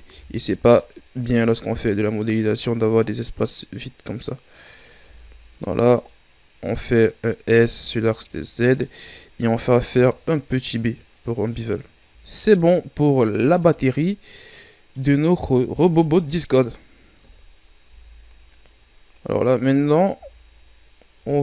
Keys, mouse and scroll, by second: 0.1 s, 5.1 Tab, 5.5-6.0 scroll down 2, 6.0-7.3 middle drag, 7.3-7.6 scroll up 2, 7.6 Tab, 8.1-9.7 middle drag, 9.7 ctrl+b, 11.9 Tab, 12.3 scroll down 2, 12.5-13.5 middle drag, 13.5 a, 13.9-15.5 middle drag, 15.5-16.5 scroll down 3, 16.5-17.2 scroll down 1, 17.2 KP_1, 17.9 Tab, 19.3-19.7 shift+scroll down 4, 19.7-20.2 scroll up 5, 20.2 Tab, 20.8-21.1 ctrl+scroll down 1, 21.1 scroll up 1, 21.2 Tab.